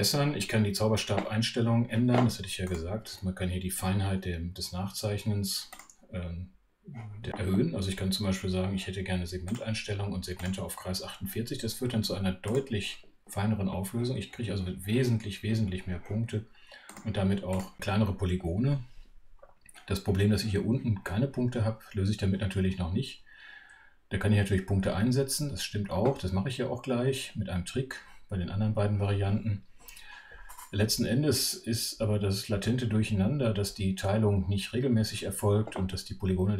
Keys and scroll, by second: 3.1 alt+F2, 3.1 Right.